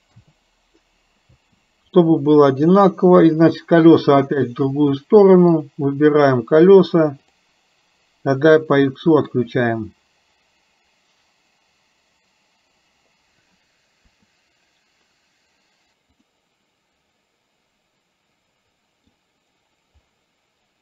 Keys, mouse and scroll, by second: 2.1 middle click, 5.7 click, 7.3 click, 8.7 middle click, 17.1-19.2 middle drag.